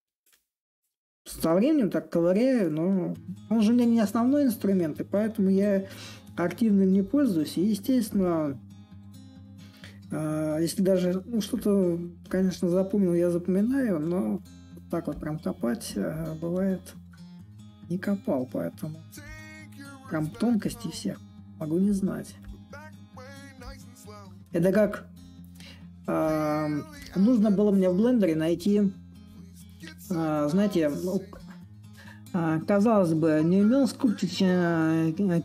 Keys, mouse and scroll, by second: 6.7-9.8 drag, 9.8 s, 11.3-16.4 drag, 19.0-24.1 drag, 24.5-29.6 drag, 30.4-35.4 drag.